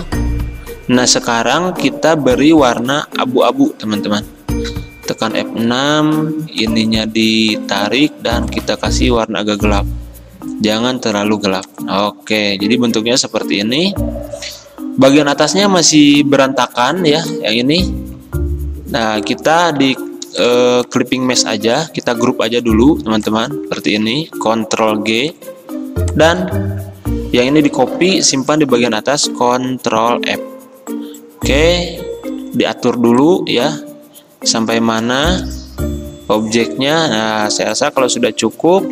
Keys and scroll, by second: 4.9 F6, 18.0 ctrl+z, 20.0 ctrl+z, 23.8 ctrl+z, 24.8 ctrl+g, 26.7 ctrl+z, 35.3 x, 38.0-38.3 typing.